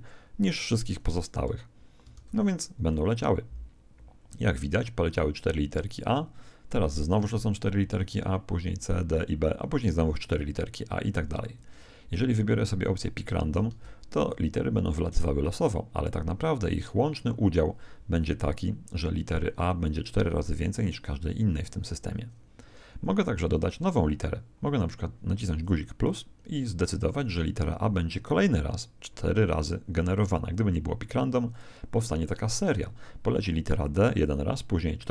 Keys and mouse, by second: 2.1 alt+a, 11.5 Escape, 12.9 click, 13.6 alt+a, 22.6 Escape, 25.6 click.